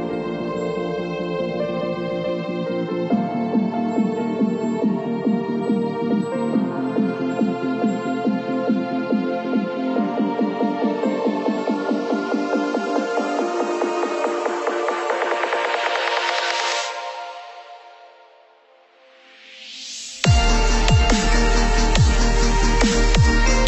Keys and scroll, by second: 0.4 Left, 3.0 Left, 5.4 Right, 7.4 ctrl+-, 7.9 ctrl+=.